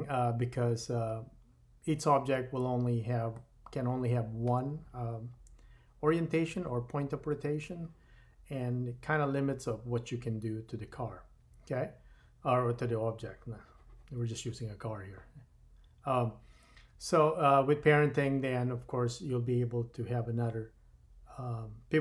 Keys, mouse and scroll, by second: 0.5 scroll up 2, 0.8-2.4 middle drag, 1.6-2.4 scroll down 1, 2.4-4.4 shift+drag, 3.4 shift+middle click, 4.4-22.0 shift+middle drag.